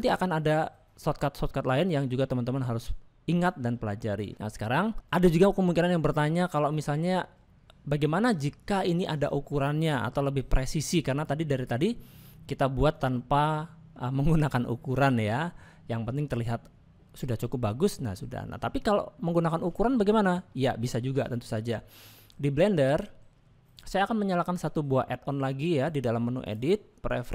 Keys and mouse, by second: 1.7 shift+middle click, 2.2-4.3 middle drag, 4.9 shift+middle click, 6.6-8.8 middle drag, 14.8 shift+middle click, 16.4-18.9 middle drag.